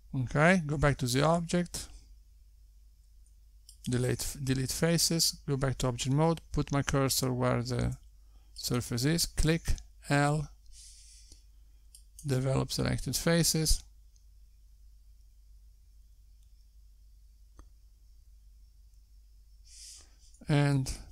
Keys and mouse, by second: 2.7 x, 4.7 Tab, 7.6 Tab, 8.5 click, 9.2 l, 20.4 x.